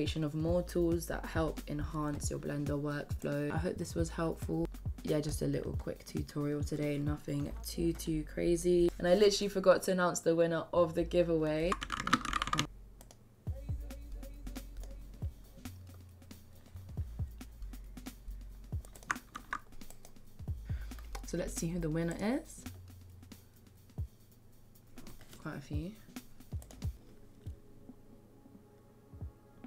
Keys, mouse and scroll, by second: 4.7 click.